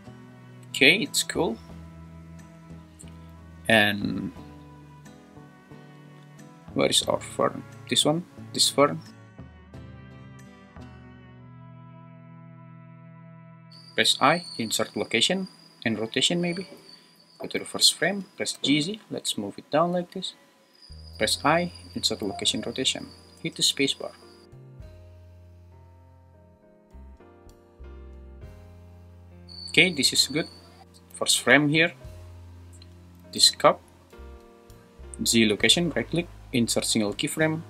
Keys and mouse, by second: 2.6 space, 8.9 click, 9.7 click, 9.9 `, 10.2 shift+Right, 11.2 middle click, 11.7 `, 11.9 g, 16.0 i, 17.1 shift+Left, 18.2 g, 18.5 z, 20.5 click, 23.4 space, 31.2 shift+Left, 33.3 g, 34.1 Escape, 36.1 right click.